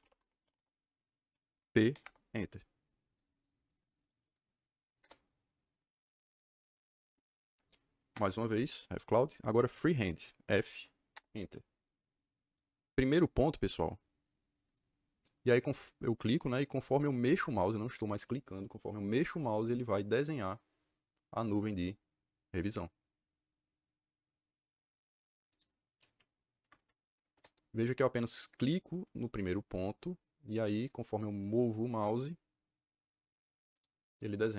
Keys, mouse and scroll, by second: 0.0-0.8 typing, 1.8 p, 1.9 Return, 3.0 click, 3.7 click, 3.9 click, 4.1 click, 4.9 Caps_Lock, 4.9 KP_Enter, 8.0 Return, 10.4 f, 11.0 Return, 14.6 click, 25.4 click, 26.5 Escape, 27.2 KP_Enter, 29.6-30.8 drag, 33.6 click.